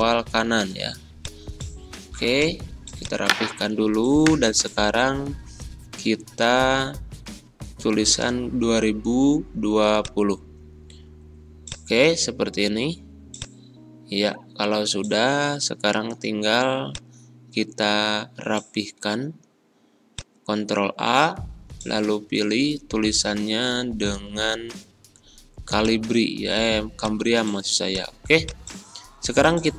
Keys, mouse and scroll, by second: 15.4 scroll up 2, 16.8 click, 18.1 ctrl+a, 20.1 click, 21.1-22.4 typing, 22.8 Return, 25.7-29.7 drag.